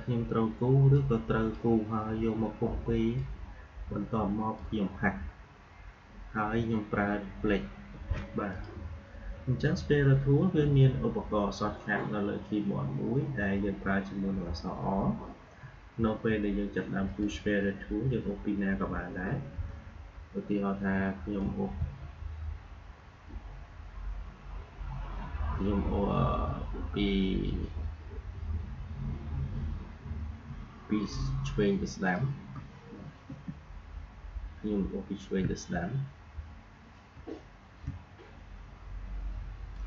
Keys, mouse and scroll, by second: 1.1-7.0 drag, 8.4 click, 17.0 click, 21.3-31.3 drag, 33.2 v, 35.1-39.8 drag.